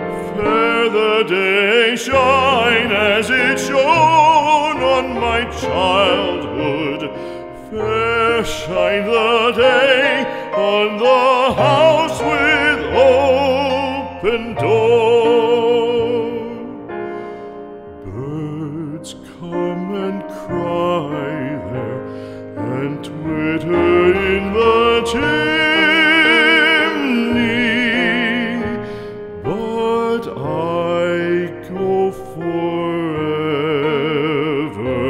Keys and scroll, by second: 19.2 x, 30.0 x, 33.5 x.